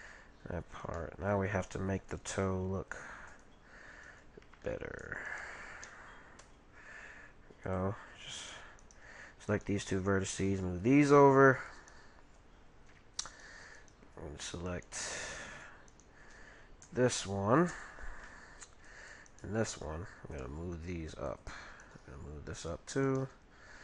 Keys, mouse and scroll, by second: 2.1 ctrl+t, 4.0-7.0 right drag, 6.4 g, 8.3-11.3 right drag, 10.4 g, 11.8-17.8 right drag, 15.1-16.8 middle drag, 19.3-21.0 right drag, 20.4 g, 21.8-23.8 right drag, 22.0 g, 23.2 g.